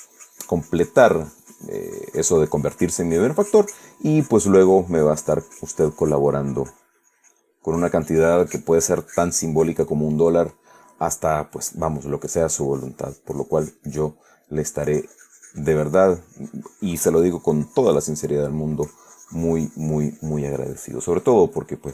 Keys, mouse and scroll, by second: 8.1-10.3 drag, 10.4-10.9 middle drag, 11.0-12.7 middle drag, 12.9-14.5 drag, 14.6 middle click, 15.2-19.0 drag, 19.1-21.9 drag.